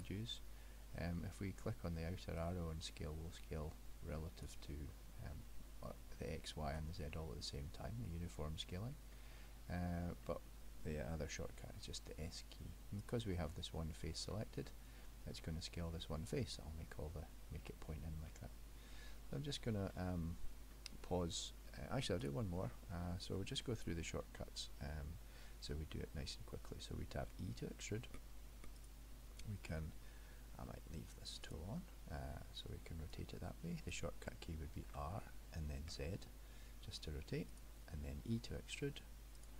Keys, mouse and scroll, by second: 0.0 click, 2.4 click, 7.1 middle click, 9.1 middle click, 11.0 middle click, 11.7 s, 14.7 middle click, 18.4 middle click, 19.9 middle click, 20.8 middle click, 22.3 click, 22.7 middle click, 23.9 middle click, 27.3 e, 31.5 click, 33.1 click, 34.9 r, 38.4 e.